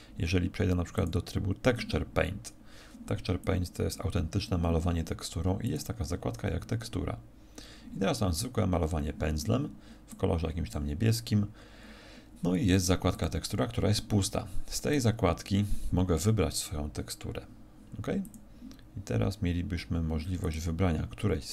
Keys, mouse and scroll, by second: 1.1 click, 3.4 click, 5.6 click, 10.1 click, 13.1 click.